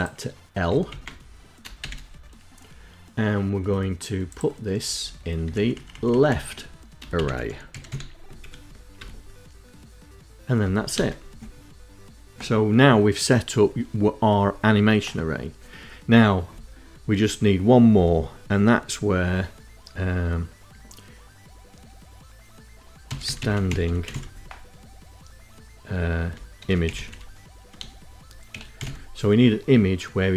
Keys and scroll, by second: 0.0 Delete, 0.9 shift+l, 4.0 Left, 4.2 Left, 4.6 shift+Right, 4.9 shift+Right, 5.1 shift+Right, 5.3 shift+Right, 5.4 shift+Right, 6.0-7.5 typing, 7.5 End, 8.1 Return, 9.8 Return, 10.1 BackSpace, 21.9-23.7 typing, 25.5-27.9 typing, 29.6 space, 29.7 =.